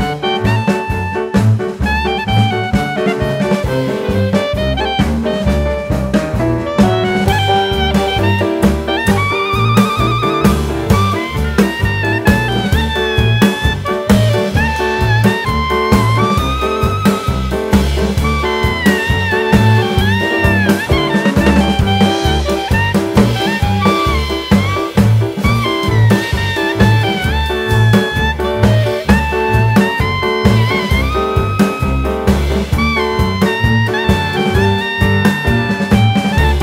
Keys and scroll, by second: 4.5 Delete, 10.0 Tab, 10.9 s, 12.0 KP_1, 19.5 Tab, 30.0 KP_1, 31.2 g, 32.6 KP_1.